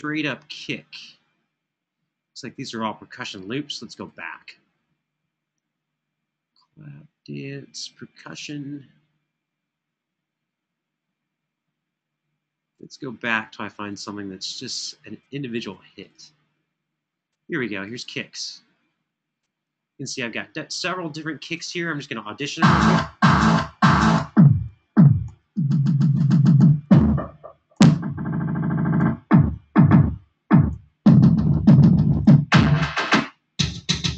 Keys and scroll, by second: 23.9 Page_Down, 25.0 Page_Down, 26.4 Page_Down, 27.5 Page_Down, 28.7 Page_Down, 30.6 Page_Down, 32.0 Page_Down, 32.9 Page_Down, 34.0 Page_Down.